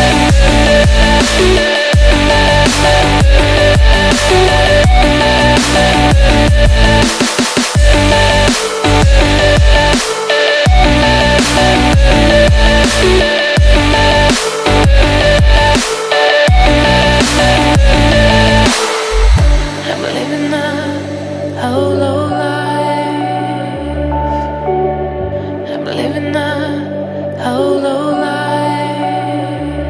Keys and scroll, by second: 0.0-4.8 typing, 21.8 ctrl+n.